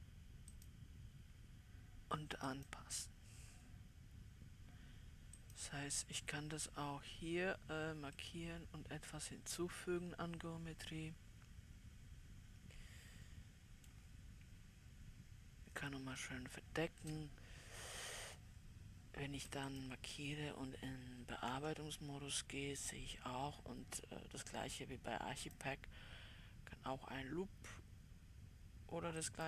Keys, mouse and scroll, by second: 8.6-10.3 right drag, 8.6 middle click, 10.3 middle click, 10.4 right click, 10.5-12.8 middle drag, 15.8-16.7 scroll up 2, 16.7-20.1 middle drag, 20.1-21.9 drag, 21.9 Tab, 25.9-29.4 drag.